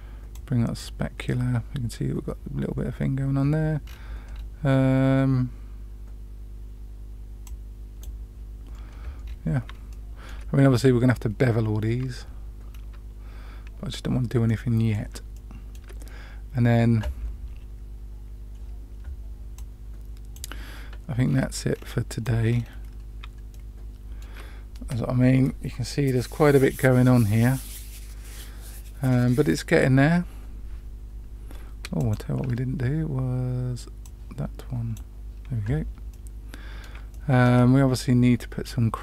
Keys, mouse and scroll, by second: 0.3-0.8 drag, 3.8-4.3 scroll down 2, 7.4-8.0 drag, 9.2-9.6 scroll up 2, 9.8-10.3 shift+middle drag, 12.7 scroll down 1, 14.4 middle click, 15.3-15.7 shift+middle drag, 22.0 click, 22.4-23.2 scroll down 2, 23.5-24.2 shift+middle drag, 31.9 click, 34.0-34.9 drag, 36.1-36.8 middle drag, 37.1-37.4 shift+middle drag.